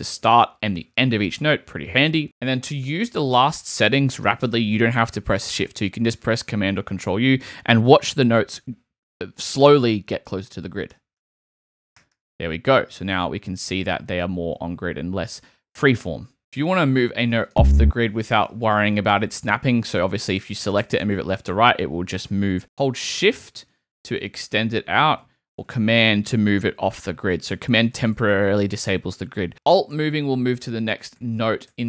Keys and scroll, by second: 2.2 super+a, 10.9 super+u, 13.3 super+z, 19.8 shift+Right, 20.6 Right, 22.6 alt+Left, 23.1 shift+Right, 25.7 shift+super+Right, 29.7 alt+super+Right, 30.3 alt+Right, 31.2 alt+Right, 31.7 alt+Left.